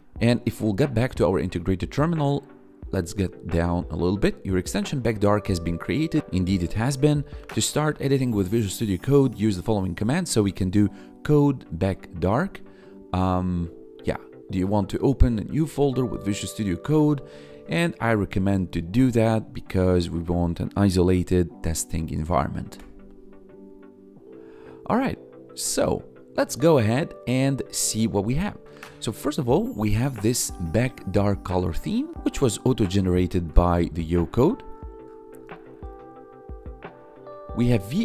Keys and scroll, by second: 22.9 Return.